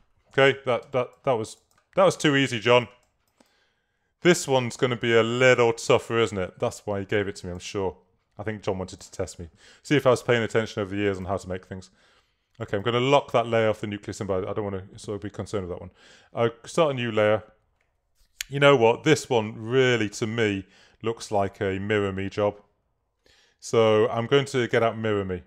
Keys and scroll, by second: 0.9 space, 7.5 space.